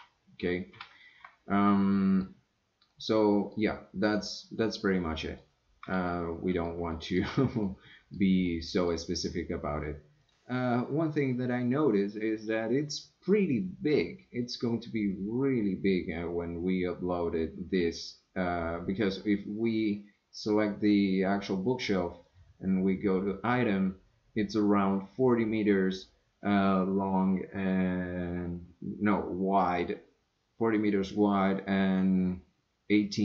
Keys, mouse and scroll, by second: 1.7 scroll down 1, 1.7-2.2 middle drag, 2.9-3.5 middle drag, 5.2 click, 6.0-6.7 middle drag, 6.9-7.2 shift+middle drag, 7.7 middle click, 8.4-8.9 middle drag, 10.2 click, 20.3 click, 22.2 click.